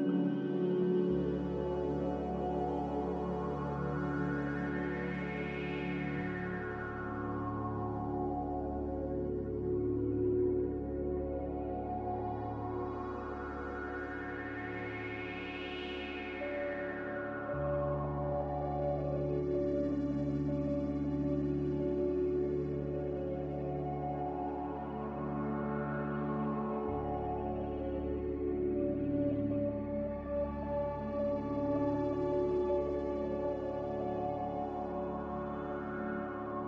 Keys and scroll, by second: 3.4 F9, 3.7 z, 6.8-7.7 typing, 13.4 5, 13.7-14.1 Return, 17.2-18.0 typing, 21.8 typing, 22.0 Return.